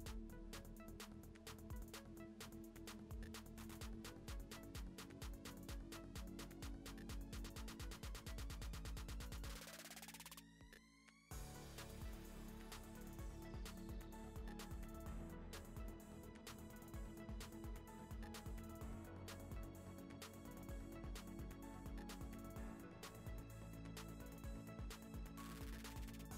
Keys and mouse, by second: 2.4 click, 4.8 click, 7.3 click, 9.3 click, 12.9 middle click, 14.1 click, 15.2-15.6 drag, 15.9 ctrl+c, 16.4 click, 16.7 ctrl+v, 17.8 click, 18.3 ctrl+v, 18.8 ctrl+s, 19.2-19.5 middle drag, 20.5-22.0 drag, 22.3 Tab, 22.7 u, 24.4 Tab, 24.8 click, 25.6 Tab, 26.2 u.